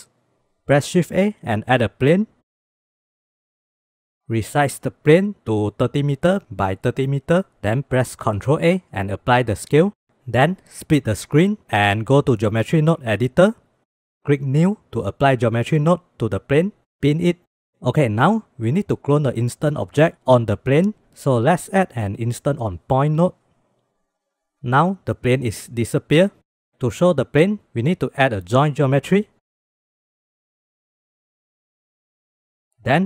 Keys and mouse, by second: 1.1 shift+a, 3.3 click, 4.8-7.2 drag, 8.2 ctrl+a, 11.2-12.3 drag, 12.8 click, 13.7 click, 14.9 click, 16.2 click, 17.2 click, 22.0 shift+a, 28.7 shift+a.